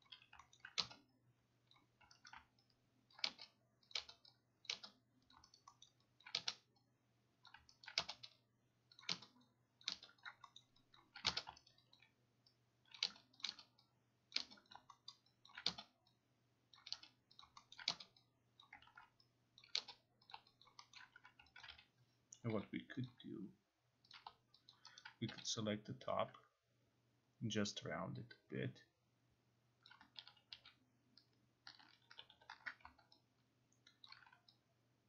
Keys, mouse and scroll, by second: 0.1 click, 0.4 alt+q, 0.6 alt+middle click, 1.7 click, 2.3 alt+right click, 3.1 ctrl+click, 4.0 click, 4.7 click, 5.4 click, 5.6 alt+right click, 5.9 alt+middle click, 6.3 alt+click, 7.5 click, 7.9 alt+right click, 9.0 click, 9.9 click, 10.3 click, 10.6 alt+middle click, 11.0 alt+click, 11.7 alt+right click, 12.0 alt+click, 13.0 click, 13.4 click, 14.7 click, 15.1 alt+middle click, 15.5 alt+click, 17.4 click, 17.8 alt+middle click, 18.6 click, 18.9 ctrl+z, 19.6 click, 20.3 click, 20.7 alt+click, 21.0 alt+middle click, 21.2-23.0 typing, 21.7 alt+click, 23.1 click, 24.1 click, 24.7 alt+click, 25.3 t, 29.9 click, 30.2 ctrl+z, 30.5 ctrl+z, 32.1 ctrl+y, 32.3 ctrl+y, 34.1 alt+click.